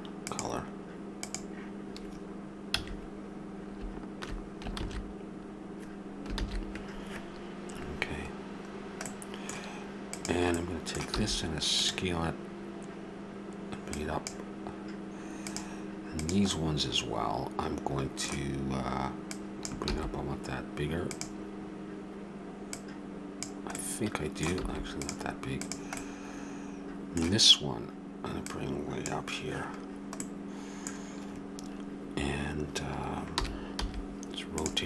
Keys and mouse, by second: 2.7 a, 4.8 shift+z, 6.5 shift+z, 10.5-12.0 right drag, 11.2 s, 13.9-15.4 drag, 16.5-17.5 middle drag, 17.5 right click, 19.2-21.0 drag, 19.9 s, 22.7 click, 23.7 click, 24.6 s, 26.0-27.6 drag, 28.4-31.8 drag, 33.3 r.